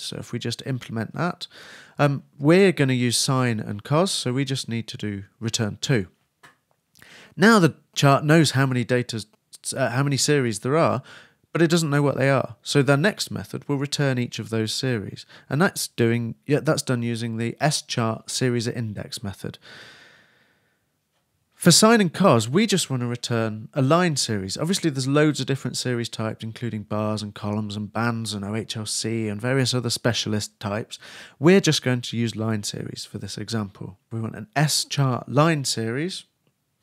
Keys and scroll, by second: 20.2 shift+Return, 20.4 shift+[, 20.6 shift+Return, 33.8-35.5 typing.